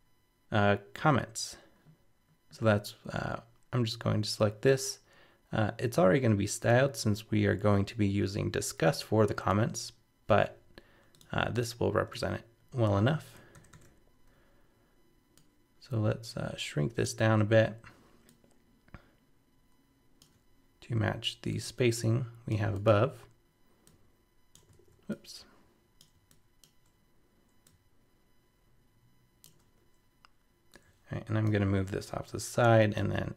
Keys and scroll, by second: 10.3 super+c, 12.1 super+v, 13.5 super+-, 24.7 super+z.